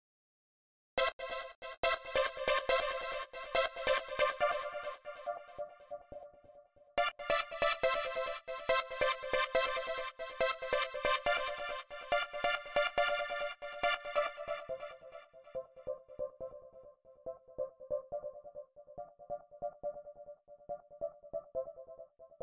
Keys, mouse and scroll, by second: 0.0 click, 0.7 space, 3.5-6.8 drag, 7.7 click, 11.7 click, 13.1-14.5 drag, 15.0 click, 19.6 click, 21.5 click.